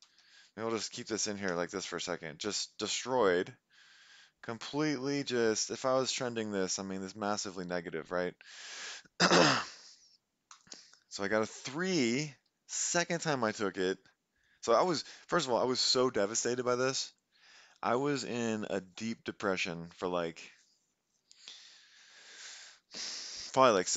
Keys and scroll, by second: 0.0 Up, 0.2 Up, 1.4 5.